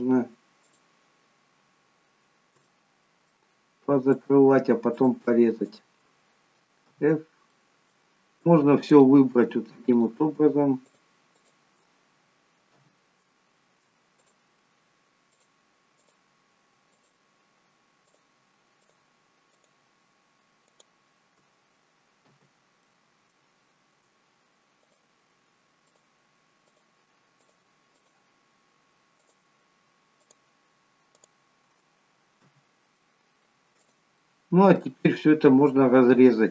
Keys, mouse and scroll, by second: 1.2 shift+click, 2.7 middle click, 4.2 shift+click, 5.7 shift+click, 7.0 f, 7.6 middle click, 8.9 click, 10.1 shift+click, 11.8 shift+click, 12.9 f, 14.3 click, 15.4 shift+click, 17.2 shift+click, 22.2 shift+click, 22.2 f, 23.0 middle click, 24.8 click, 26.0 shift+click, 27.9 shift+click, 32.5 shift+click, 32.5 f, 33.0 middle click, 33.9 click, 34.3 middle click.